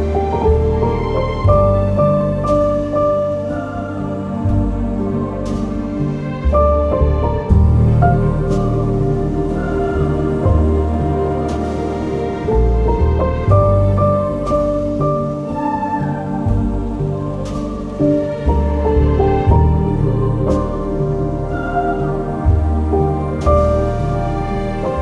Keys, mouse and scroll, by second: 4.3 click, 4.6 click, 9.7 click, 9.8 click, 17.8 click, 17.9 scroll, 18.5 click, 20.7-25.0 drag.